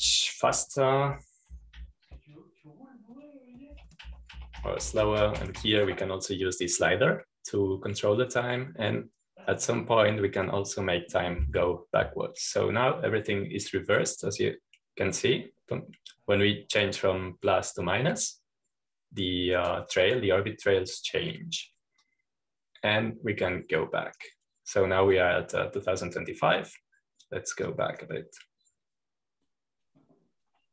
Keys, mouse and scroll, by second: 1.4 click, 2.0-4.6 typing, 5.8-8.0 typing, 8.7-22.2 drag, 23.9-27.3 drag, 29.6-30.7 drag.